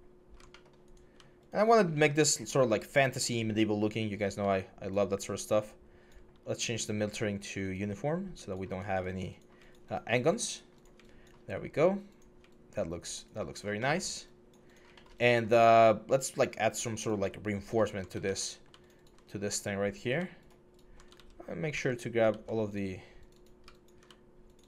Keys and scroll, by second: 18.0 ctrl+z, 19.0 4, 20.9 ctrl+z, 21.5 ctrl+z.